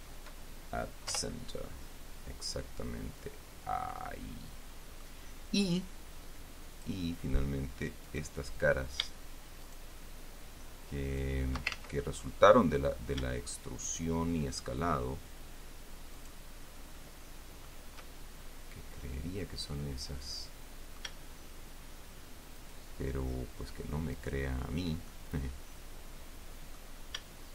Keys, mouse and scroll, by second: 1.5 Return, 2.6-5.5 middle drag, 7.0 click, 8.4 right click, 9.9 shift+right click, 11.4 shift+right click, 12.3 ctrl+shift+z, 12.3 ctrl+shift+middle click, 13.1 scroll up 1, 14.2 shift+right click, 16.5 shift+right click, 17.3 shift+middle click, 18.3-21.5 shift+middle drag, 22.9 shift+right click, 24.5 shift+right click, 25.4-27.3 shift+middle drag.